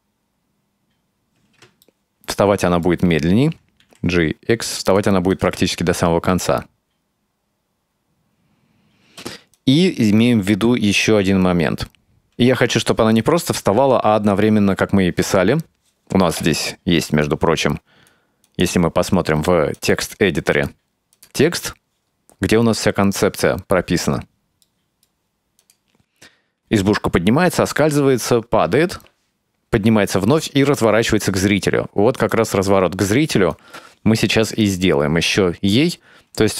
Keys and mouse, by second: 1.4 space, 1.9-3.0 ctrl+middle drag, 3.9 g, 5.4-5.7 drag, 5.5 space, 9.1 space, 9.6-12.3 drag, 12.3 space, 14.6 space, 17.3 click, 18.5-19.9 drag, 20.6 click, 24.7 middle click, 25.7 click, 32.4 click, 33.6 click, 34.6-36.5 drag.